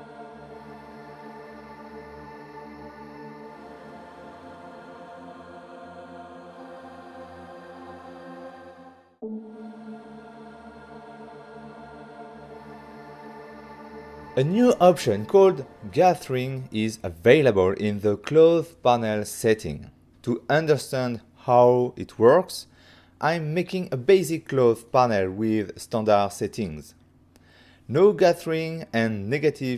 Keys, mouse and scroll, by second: 0.3 click, 0.6 ctrl+middle click, 0.9 middle click, 1.4 c, 1.7 click, 2.1 right click, 2.1 middle click, 2.7 click, 2.7 c, 3.1 right click, 3.3 middle click, 3.7 click, 4.1 right click, 4.4 Return, 4.8 right click, 5.3 ctrl+middle click, 5.4 middle click, 5.7 shift+middle click, 6.0 ctrl+middle click, 6.5 middle click, 8.2 shift+middle click, 8.6 middle click, 14.2 click, 15.2 click, 17.1 shift+middle click, 18.5 ctrl+middle click, 20.2 f, 21.8 click, 25.8 click, 26.0 click, 27.5 click, 28.6-29.4 typing.